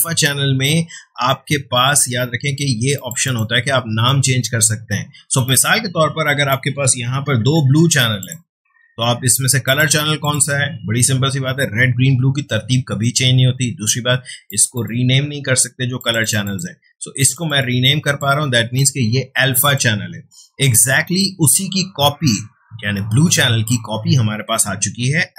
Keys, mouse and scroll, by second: 2.9-7.1 drag, 7.1 BackSpace, 8.2 click, 14.5-19.6 drag.